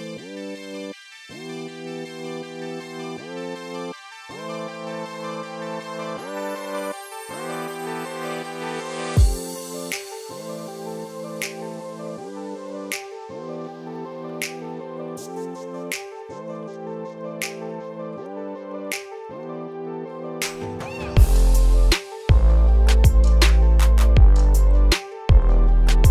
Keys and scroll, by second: 7.0 ctrl+space, 13.1 ctrl+space.